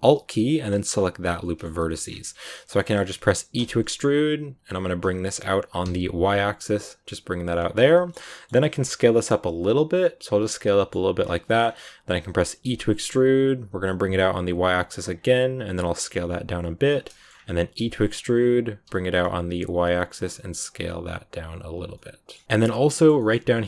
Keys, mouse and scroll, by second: 0.4 alt+right click, 1.3 scroll up 1, 1.3 middle click, 2.0 scroll down 2, 2.4-3.5 shift+middle drag, 3.5 e, 7.8 shift+middle click, 10.4 scroll down 2, 10.5 middle click, 10.9 s, 11.3 shift+scroll up 2, 11.4 shift+middle click, 12.5 e, 17.0 shift+scroll up 3, 17.0 shift+middle click, 17.6 e, 21.8 scroll up 1, 21.8-23.3 middle drag, 23.3 scroll up 2, 23.4-23.6 middle drag.